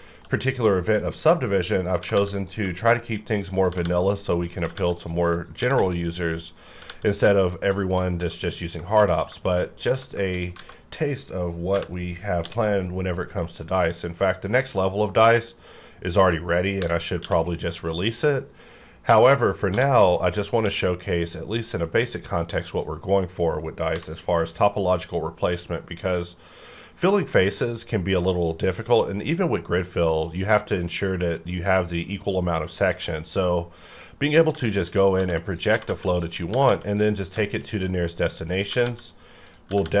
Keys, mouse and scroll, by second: 0.0 shift+middle click, 0.5-1.1 scroll up 1, 1.1 click, 2.0 g, 2.1 g, 2.3 click, 2.7 shift+middle click, 3.5 click, 3.7-6.9 typing, 4.0 click, 4.9 click, 5.0 click, 6.0 click, 7.0 click, 7.4 scroll down 1, 7.8 shift+middle click, 8.0 scroll down 1, 8.2 Tab, 8.6 scroll down 1, 8.9 shift+middle click, 9.4 shift+middle click, 9.6 shift+scroll up 2, 9.8 Tab, 10.2 shift+middle click, 10.3 scroll up 1, 10.7 alt+a, 11.0 scroll down 1, 11.6 3, 12.3 c, 12.5-13.4 scroll down 2, 13.4-17.1 drag, 17.1 q, 19.7 f, 20.6 q, 22.0 click, 22.6 click, 23.9 v, 24.3-25.1 scroll down 2, 25.1-26.5 scroll down 1, 26.5-28.6 scroll down 1, 28.6-30.2 scroll up 2, 30.2 scroll up 1, 32.9 click, 34.6 shift+middle click, 34.9 shift+scroll up 2, 35.2-36.7 typing, 35.5 click, 35.6 click, 36.1 click, 36.9 click, 37.2 scroll down 1, 37.4 shift+middle click, 37.7 scroll up 1, 38.6 click, 38.7-40.0 typing, 39.0 click.